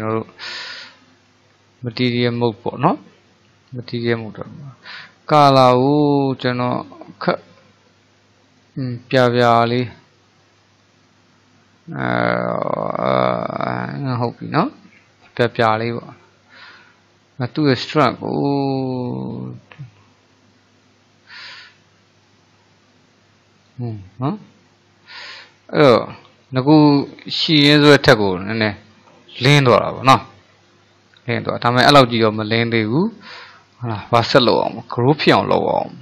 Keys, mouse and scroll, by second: 0.2-0.5 scroll down 1, 0.5-1.6 middle drag, 1.6-2.1 scroll up 1, 2.1-4.8 shift+middle drag, 4.8 click, 14.7-17.5 middle drag, 17.5-20.5 drag, 24.4-27.1 middle drag, 27.1 click, 27.7-30.8 middle drag, 31.5-31.9 scroll up 1, 31.9 shift+middle click, 32.7-33.1 scroll down 1, 33.1-36.0 shift+middle drag.